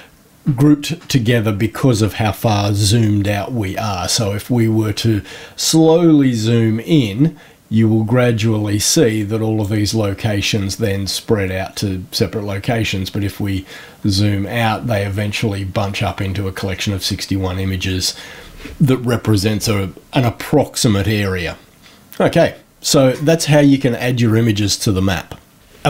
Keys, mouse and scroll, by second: 4.0-4.6 scroll up 2, 5.7 scroll up 1, 8.0-8.4 scroll up 1, 9.1 click, 12.4 scroll down 1, 13.2-13.6 scroll down 4, 14.2-15.3 scroll down 4.